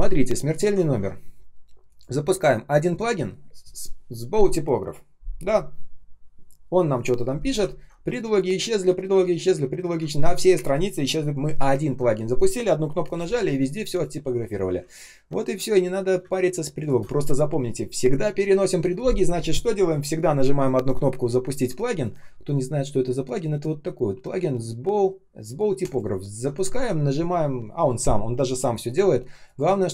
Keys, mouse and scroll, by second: 0.7-1.2 ctrl+scroll down 1, 2.8 ctrl+., 3.2 Return, 7.5-8.2 ctrl+scroll up 1, 8.2 space, 9.6-10.7 ctrl+scroll down 1, 13.2 space, 13.7 space, 13.7 space, 14.9 ctrl+scroll up 1, 16.1 space, 16.6 space, 16.6 space, 29.7 ctrl+scroll down 1.